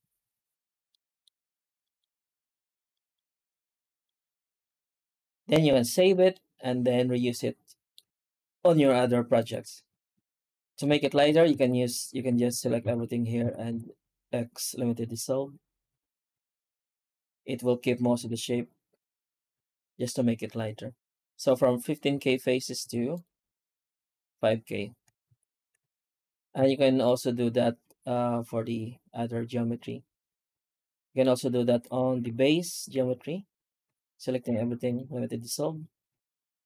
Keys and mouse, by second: 0.7-1.1 middle drag, 1.7 middle drag, 2.8 middle drag, 3.7 middle drag, 4.4 z, 5.8 ctrl+space, 6.2-7.8 middle drag, 9.2 right click, 9.5 Tab, 10.4 middle click, 10.8 shift+middle click, 11.4 ctrl+s, 12.3 alt+a, 13.3 a, 13.5 x, 15.8 alt+a, 16.2 Tab, 16.9 alt+a, 18.1 ctrl+z, 18.4 ctrl+z, 18.8 ctrl+z, 19.4 ctrl+z, 22.7 x, 25.2 ctrl+z, 25.7 Tab, 26.4 alt+a, 26.9-31.1 middle drag, 31.7 right click, 32.1 h, 32.5 right click, 32.8 Tab, 33.7 a, 34.3 x, 36.0 alt+a.